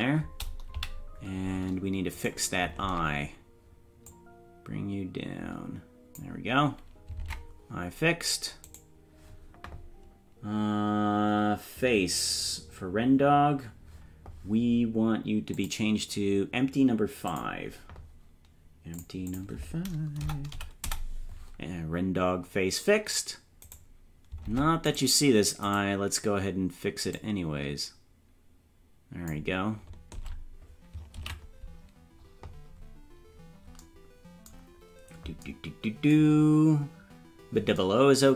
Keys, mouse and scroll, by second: 0.7 KP_Decimal, 2.2 right click, 2.8 ctrl+Tab, 4.1-6.3 drag, 7.2 ctrl+Tab, 8.7 right click, 15.5 click, 17.3 click, 18.9-21.3 drag, 23.7 right click, 24.5 ctrl+Tab, 25.0 right click, 25.8 right click, 27.1-29.5 drag, 30.2 ctrl+Tab, 31.4 ctrl+s, 33.1-33.5 scroll down 4, 34.8-35.1 scroll down 2.